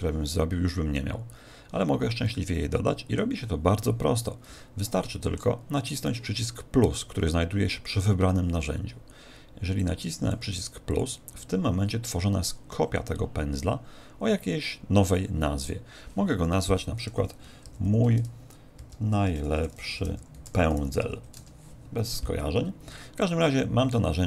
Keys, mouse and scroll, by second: 2.2 middle click, 4.8 ctrl+middle click, 9.7 click, 10.8 click, 15.6 click, 23.1 click.